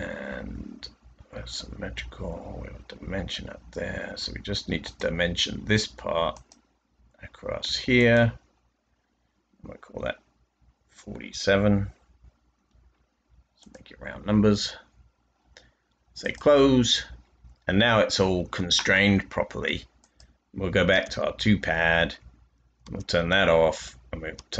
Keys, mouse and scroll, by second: 10.8-12.5 typing, 16.2-17.0 typing, 20.8 typing, 22.7 typing, 24.3 typing.